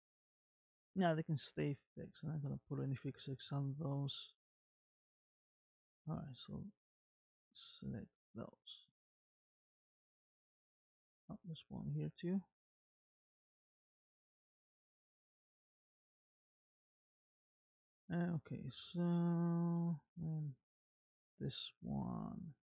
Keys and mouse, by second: 2.4 click, 3.2 r, 6.1-7.4 drag, 8.6-11.0 middle drag, 12.2 shift+click, 13.9 m, 15.8 click, 16.2-20.0 middle drag, 20.9 click, 21.4 r.